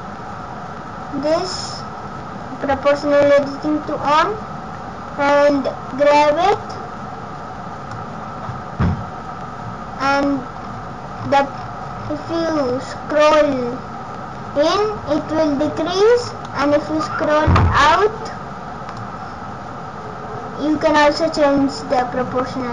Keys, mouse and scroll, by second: 6.5 click, 7.9 click, 16.6 scroll down 1, 17.5 scroll down 5, 19.0 click.